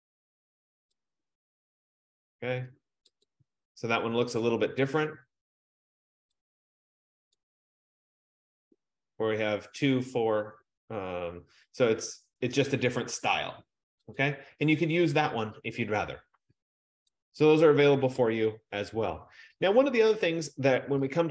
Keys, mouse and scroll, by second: 1.2 click, 3.3 click, 7.5-12.6 drag, 14.3 click, 15.3 F15, 17.2 click, 18.2-21.3 BackSpace.